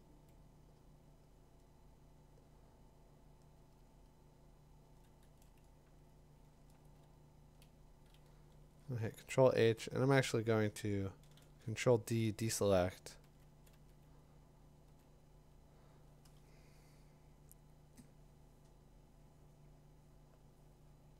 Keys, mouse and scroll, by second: 7.4 click, 8.8 h, 9.9 d, 13.2 [, 13.5 [, 13.7 [, 14.9 [.